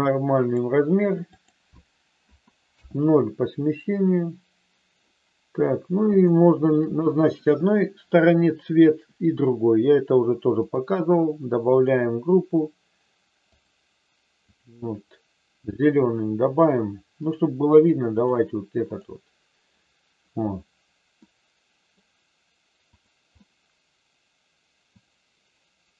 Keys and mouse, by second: 1.3-3.2 drag, 6.2 shift+middle click, 10.6 click, 11.8-13.7 drag, 14.4 click, 17.3 click, 18.8 click, 21.2 middle click, 22.8-24.1 drag, 24.8 click.